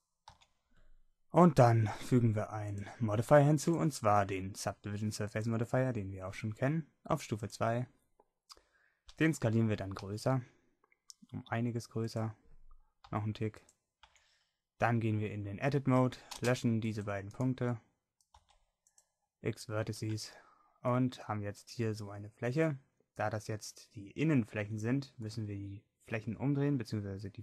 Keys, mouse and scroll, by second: 0.3 n, 2.7 click, 10.0 s, 13.1 s, 14.5 Tab, 16.0 a, 16.4 c, 18.4 x, 20.1 Tab.